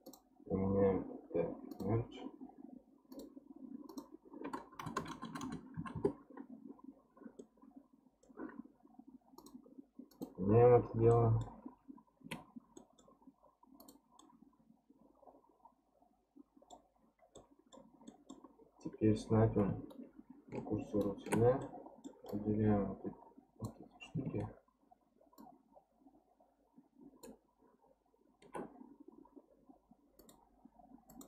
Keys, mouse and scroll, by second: 0.0-1.8 drag, 3.1-5.1 drag, 5.1 KP_0, 5.2 KP_0, 7.4-9.4 middle drag, 9.4-11.1 drag, 11.1-11.8 middle drag, 11.8-12.2 scroll down 3, 12.2 Tab, 12.8-13.8 middle drag, 13.8 click, 14.2-17.2 middle drag, 17.3-18.4 middle drag, 18.4 scroll up 1, 19.9-21.6 shift+right drag, 21.6 middle click, 22.3 click, 25.4 shift+click, 30.2-31.2 drag.